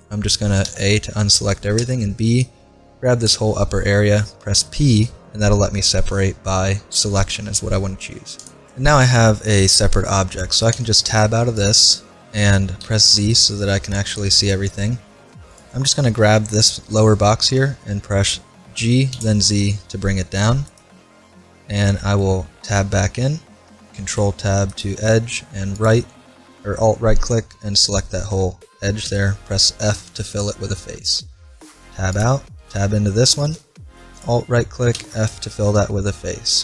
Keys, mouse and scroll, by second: 0.7 a, 1.8 b, 4.6 p, 10.7 Tab, 11.6-13.5 right drag, 12.8 z, 15.5-17.4 right drag, 18.8 g, 22.3-23.5 middle drag, 22.6 Tab, 23.9 ctrl+Tab, 25.8-27.7 right drag, 29.1 f, 31.8 Tab, 32.1-34.0 right drag, 32.6 Tab, 34.2-35.9 right drag, 35.0 f, 35.7 Tab.